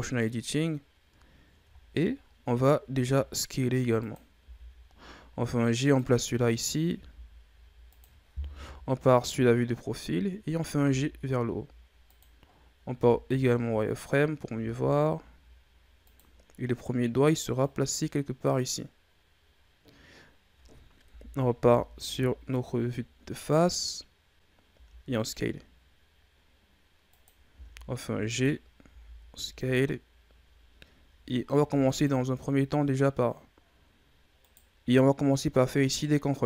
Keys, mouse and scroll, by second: 0.5-1.2 scroll up 3, 1.2-1.7 ctrl+scroll up 3, 1.7-2.1 scroll down 1, 2.1-2.5 scroll up 5, 2.9 s, 4.4 g, 6.1-6.7 ctrl+scroll up 3, 6.9 s, 8.5 KP_3, 9.7-10.8 scroll down 4, 10.8 g, 12.4-12.8 scroll up 2, 12.8 z, 13.6-14.5 scroll up 1, 14.5 g, 17.5-20.7 drag, 21.0 KP_1, 21.5 z, 22.1 scroll down 2, 22.5-23.1 ctrl+scroll up 4, 23.2-24.6 scroll up 3, 24.6 s, 27.4 g, 28.7 s, 31.4 ctrl+r, 35.5-36.4 drag.